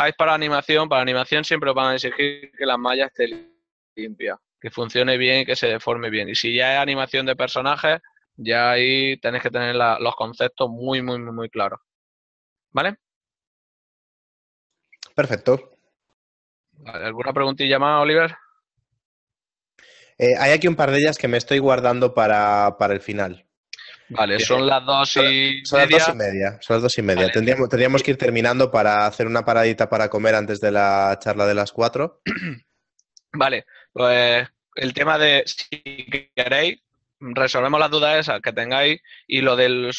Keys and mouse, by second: 14.6 click, 19.1 ctrl+middle click, 22.5 middle click, 23.5 shift+middle click, 23.8 middle click, 27.5 click, 35.2 alt+click.